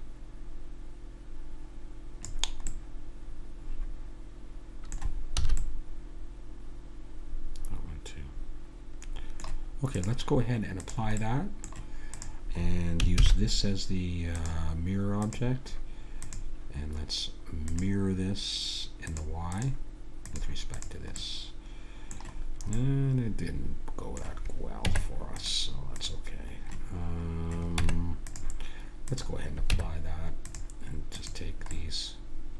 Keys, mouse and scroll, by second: 2.7-5.4 middle drag, 5.4 a, 5.6-7.6 middle drag, 9.9-11.2 drag, 11.2-13.1 middle drag, 13.1 click, 13.1 shift+s, 15.2-18.2 drag, 19.1-21.2 drag, 21.2 middle click, 22.3-22.8 scroll up 1, 23.1 middle click, 23.9 middle click, 24.8 Tab, 26.0-27.8 drag, 27.8 Tab, 29.0-30.6 drag, 29.7 Tab, 31.7-32.5 middle drag.